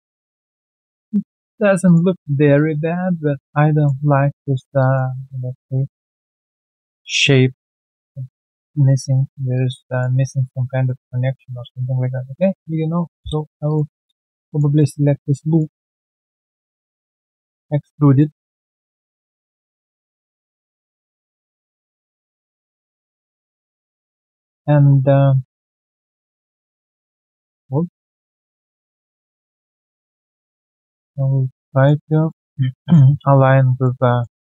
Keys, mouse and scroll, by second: 0.8 alt+middle click, 1.3 alt+click, 1.5 alt+right click, 1.8 alt+click, 2.1 alt+middle click, 2.5 alt+click, 3.3 alt+click, 3.7 alt+middle click, 4.8 alt+click, 5.4 alt+middle click, 6.0 alt+click, 6.4 alt+middle click, 7.5 alt+click, 8.6 alt+click, 9.1 alt+middle click, 9.5 alt+click, 9.9 alt+middle click, 10.8 alt+middle click, 11.4 alt+right click, 13.3 q, 13.5 shift+click, 13.6 shift+double click, 13.9 shift+scroll down 1, 14.2 alt+click, 14.4 alt+middle click, 15.0 alt+right click, 15.2 alt+click, 15.5 alt+right click, 15.7 alt+click, 16.0 scroll down 1, 16.3 w, 16.4 alt+middle click, 17.3 shift+click, 17.8 alt+click, 18.1 alt+middle click, 18.4 alt+right click, 18.7 alt+middle click, 19.3-19.7 alt+scroll down 1, 20.2 typing, 20.6 alt+middle click, 21.2 alt+middle click, 21.3 alt+click, 21.6 alt+middle click, 21.8 alt+right click, 22.6 right click, 24.0 alt+click, 24.2 alt+click, 24.6 scroll down 1, 25.2 alt+scroll down 1, 26.3 double click, 27.7 ctrl+z, 28.7 ctrl+z, 29.2 ctrl+z, 31.2 alt+right click, 31.6 alt+middle click, 31.9 alt+right click, 32.2 alt+middle click, 33.7-34.4 typing, 34.3 scroll down 2.